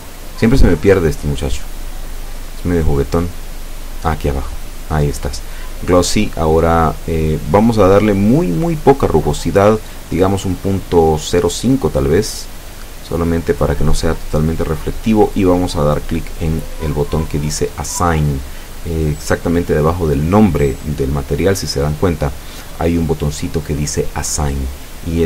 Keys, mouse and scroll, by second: 4.5 click, 13.0 click, 17.2 click, 21.0 KP_Decimal, 21.5 KP_0, 21.6 KP_5, 21.8 KP_Enter, 23.5 middle click, 25.0-25.2 drag.